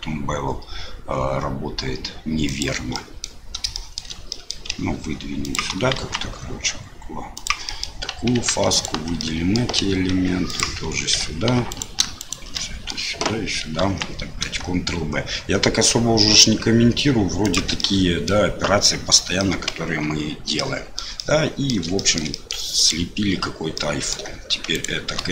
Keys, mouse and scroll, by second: 3.1 middle click, 3.8 shift+middle click, 4.3 click, 4.7 e, 5.9 ctrl+b, 7.8 click, 8.7 alt+click, 9.2 middle click, 9.7 e, 11.1 2, 11.7 alt+click, 12.2 alt+shift+click, 12.5 middle click, 12.6 click, 13.8 ctrl+b, 17.7 click, 19.5 middle click, 19.9 Tab, 20.5 middle click, 21.1 middle click, 21.9 shift+middle click, 22.3 middle click, 22.7 click, 23.7 middle click, 24.7 shift+click.